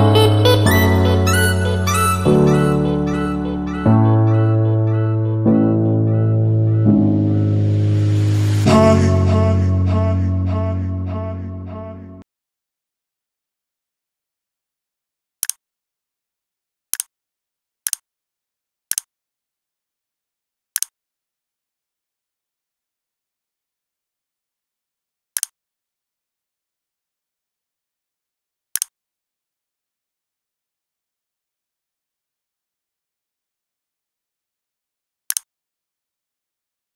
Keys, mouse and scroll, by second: 0.0 click, 6.6 click, 7.7 F2, 8.8 click.